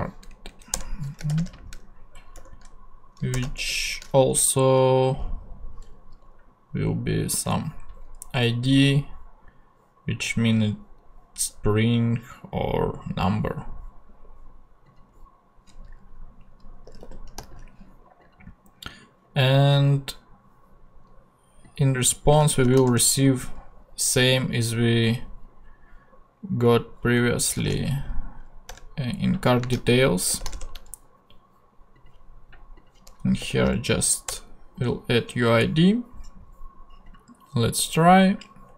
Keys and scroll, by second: 0.3 Down, 0.7 Return, 1.3-3.6 typing, 16.6-17.9 typing, 22.3 space, 22.6 shift+[, 22.9 shift+Return, 23.8 Return, 27.3-28.5 typing, 28.7 Return, 29.6 space, 30.3 shift+[, 30.5 shift+Return, 31.5 Return, 33.2-34.0 typing, 34.3 Return.